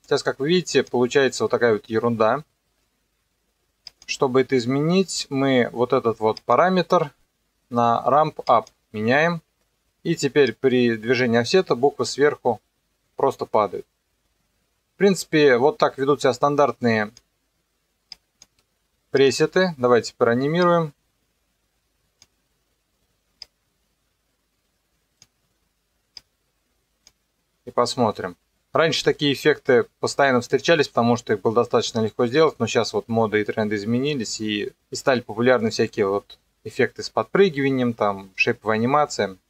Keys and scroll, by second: 28.0 KP_0.